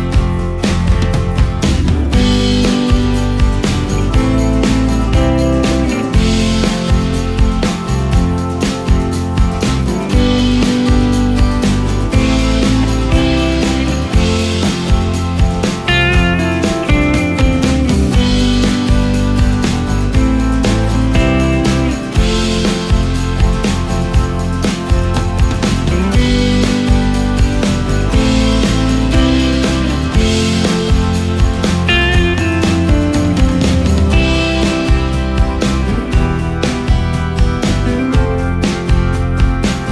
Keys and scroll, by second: 5.7 shift+space, 13.3 ctrl+space, 14.2 ctrl+space, 14.8 ctrl+space, 17.8 ctrl+shift+space, 21.5 space, 28.1 o, 35.5 ctrl+shift+space.